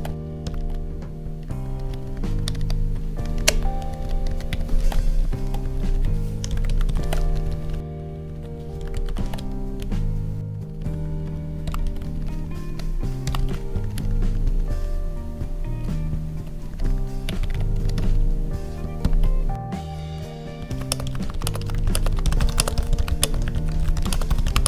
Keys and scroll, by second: 0.0 Right, 0.1 ctrl+z, 0.5 ctrl+s, 1.4 Down, 3.3 alt+shift+Down, 3.8 Up, 4.7 ctrl+s, 4.9 Down, 5.2 ctrl+Right, 5.8 ctrl+shift+Right, 6.9 ctrl+s, 7.2 Down, 7.4 Right, 7.7 Down, 8.2 ctrl+shift+Right, 9.2 ctrl+s, 9.7 Down, 10.4 ctrl+z, 10.5 Up, 11.8 ctrl+s, 12.0 Down, 13.3 ctrl+s, 13.8 ctrl+Down, 16.6 Down, 17.8 Up, 19.0 ctrl+/, 20.8-24.6 typing.